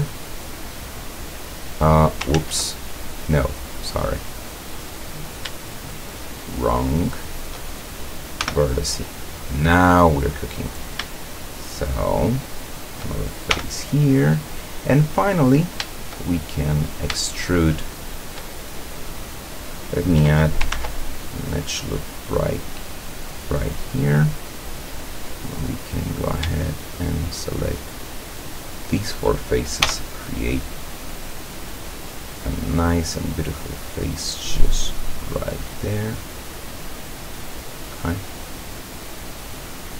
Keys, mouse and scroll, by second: 0.3-2.4 middle drag, 2.4 ctrl+z, 2.8-4.5 ctrl+middle drag, 5.1 right click, 5.9 shift+right click, 6.7 shift+right click, 7.2 shift+right click, 8.4 f, 9.4-10.5 middle drag, 10.7 right click, 11.3 shift+right click, 12.1 shift+right click, 12.7 shift+right click, 13.6 f, 14.0-15.8 middle drag, 16.8 right click, 17.3-19.8 shift+middle drag, 20.8 ctrl+r, 21.5 click, 24.0 click, 25.4 right click, 27.0 shift+right click, 27.8 shift+right click, 28.8 shift+right click, 29.8 f, 31.7 right click, 32.7-34.3 drag, 35.3 right click, 36.1-37.7 drag, 38.2-39.9 drag.